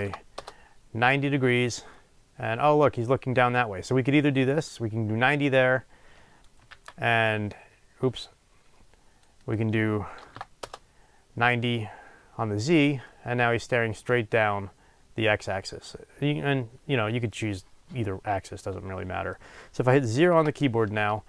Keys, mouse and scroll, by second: 0.3-2.0 drag, 0.5 Return, 2.0-5.5 middle drag, 5.5-13.0 drag, 7.2 ctrl+z, 10.7 Return, 13.0-21.2 middle drag, 20.3 KP_0.